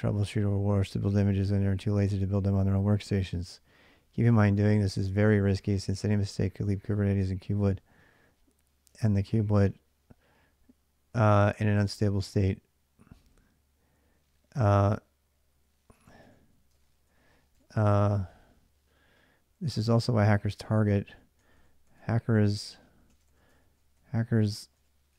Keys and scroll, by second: 0.0-2.2 typing, 4.5 ctrl+[, 4.5 j, 5.9-6.6 typing, 8.8 ctrl+[, 9.0 typing, 11.1-12.6 typing, 14.9-17.5 typing, 17.0 Return, 19.4-25.1 typing.